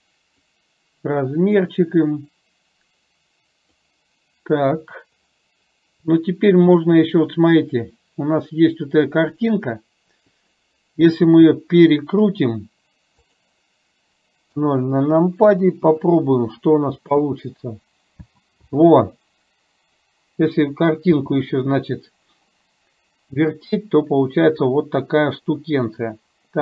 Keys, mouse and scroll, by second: 0.5 click, 6.8 click, 11.4 r, 14.5 KP_0, 15.9 KP_0, 16.9 space, 18.4 space, 18.8 space, 21.3 space.